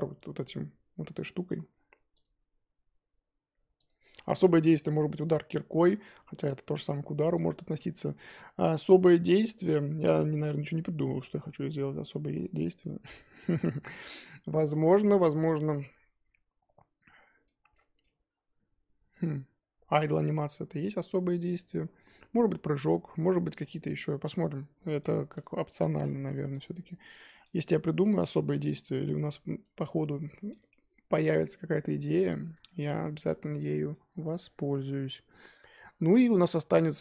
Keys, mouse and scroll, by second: 1.2 click, 2.2 click, 3.8 click, 6.9 click, 7.4 click, 15.1-18.1 middle drag, 18.1-20.0 scroll up 3, 20.0-20.3 scroll down 2, 20.4-23.5 middle drag, 23.5-23.8 scroll down 3, 23.8-31.3 middle drag, 31.3-32.3 scroll up 3, 32.3 click, 32.6-37.0 shift+middle drag.